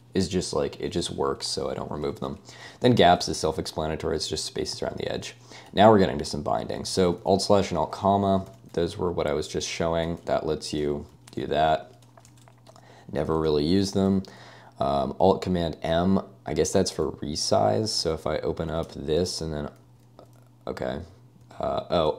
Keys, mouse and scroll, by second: 1.6-7.2 typing, 2.4 Escape, 8.5 super+n, 10.2 alt+,, 10.6 alt+/, 10.8 alt+,, 11.0 alt+/, 11.1 alt+,, 11.3 alt+/, 11.4 alt+,, 12.3 super+w, 13.5 Escape, 13.5 j, 13.6 j, 18.0 super+n, 19.9 â, 20.2 â.